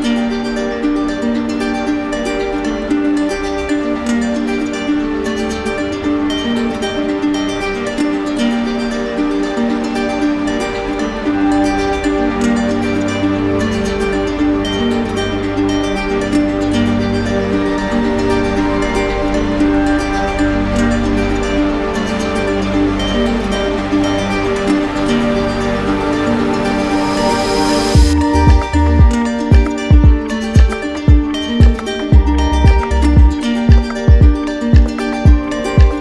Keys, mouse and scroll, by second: 3.6-4.7 drag, 7.1-8.2 drag, 10.0-11.1 drag, 12.1-13.1 drag, 17.7 click, 18.7 click, 22.9 click, 23.5 alt+click, 23.6 alt+click, 24.6 alt+click, 25.1 alt+click, 28.1 click, 28.8 alt+click, 29.9 shift+click, 30.5 alt+click, 33.3 click.